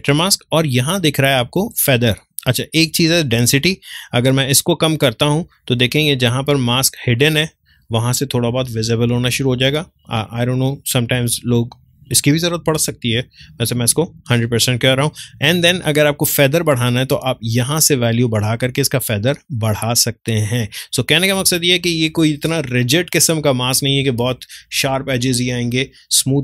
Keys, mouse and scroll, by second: 2.7-10.1 drag, 12.7 click, 12.7-15.8 drag, 15.8-21.4 drag, 21.4 ctrl+space, 21.7 ctrl+click, 21.9 ctrl+space, 23.1 click, 23.3 space.